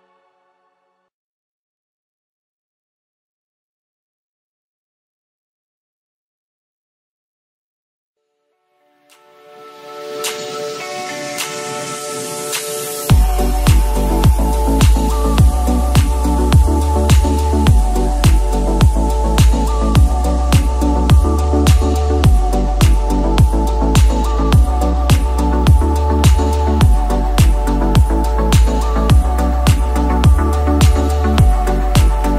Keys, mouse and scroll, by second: 0.4-1.4 scroll up 5, 1.4-2.3 shift+middle drag, 2.3-2.7 drag, 3.1 shift+scroll down 1, 3.2-4.8 shift+middle drag, 4.8 g, 8.2 click, 8.4-9.2 scroll down 5, 9.2-12.4 middle drag, 12.4 scroll down 1, 12.5-13.3 scroll up 4, 13.3-14.6 middle drag, 14.9-15.3 shift+drag, 15.7-16.0 shift+drag, 16.5 shift+click, 17.2-17.7 shift+drag, 18.8 ctrl+j, 19.1 click, 19.6-20.0 scroll down 1, 20.0-23.7 middle drag, 23.7-24.2 scroll down 2, 24.2-25.6 middle drag, 25.6 scroll down 1, 25.8-28.5 middle drag, 28.5 click, 31.4-32.3 drag.